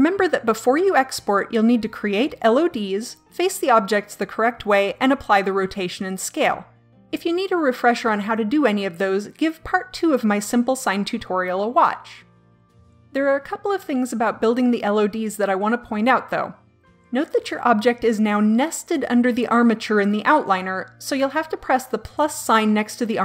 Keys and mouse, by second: 11.0-18.5 drag.